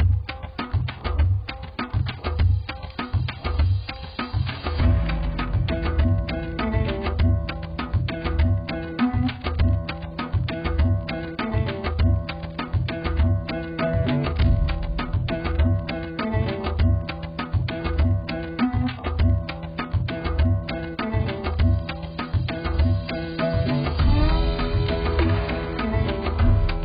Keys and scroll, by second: 0.3 z, 2.1 ctrl+0.